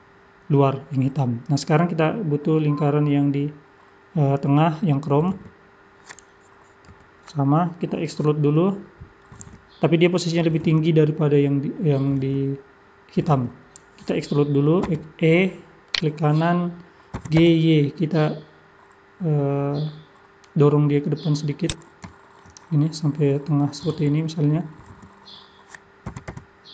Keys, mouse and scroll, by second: 6.9 KP_3, 7.4 scroll up 4, 9.3 scroll up 1, 10.7-12.1 scroll up 5, 14.9 e, 17.1 g, 22.1 shift+middle click, 22.6 scroll up 3, 25.0 shift+middle click, 25.0 scroll up 3, 26.1 g.